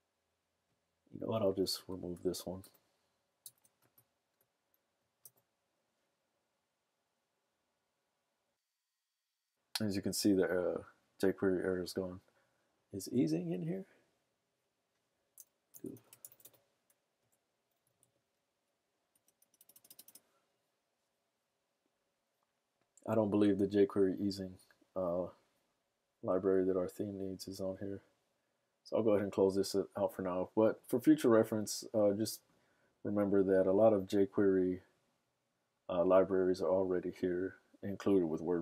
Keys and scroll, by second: 3.5 super+/, 3.6 super+s, 4.1 super+Tab, 5.5 super+r, 15.7 super+f, 15.8-19.7 typing, 21.3-22.1 typing.